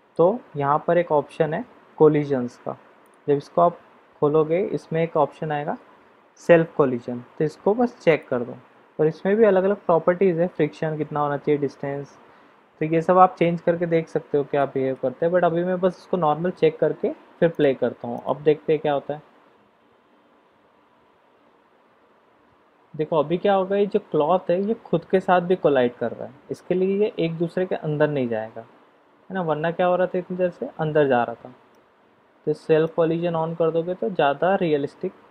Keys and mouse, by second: 3.0 click, 8.1 click, 14.5-14.9 middle drag, 17.5 click, 18.1 click, 32.3-33.5 middle drag.